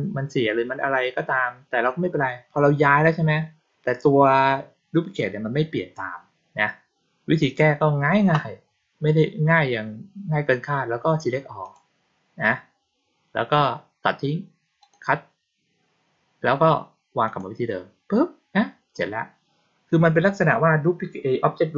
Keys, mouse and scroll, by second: 11.5 click, 14.7 click, 17.1 click.